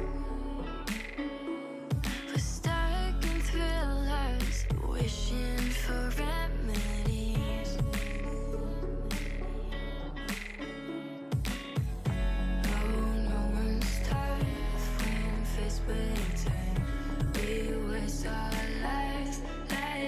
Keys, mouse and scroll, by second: 0.7 click, 0.9 scroll down 2, 1.1-2.4 middle drag, 2.4 l, 2.9 s, 5.5 middle click, 5.7-6.4 scroll up 1, 6.4 s, 8.4-9.3 middle drag, 9.3 drag, 9.4 Tab, 9.5 click, 9.7-10.5 middle drag, 10.5 click, 10.7 Tab, 10.9 middle click, 11.2 3, 11.3 click, 11.5-13.0 middle drag, 13.0 g, 16.7 middle click, 17.6 2, 17.9 click, 18.1 middle click, 18.4-19.2 scroll up 2, 18.6 middle click, 19.2 g.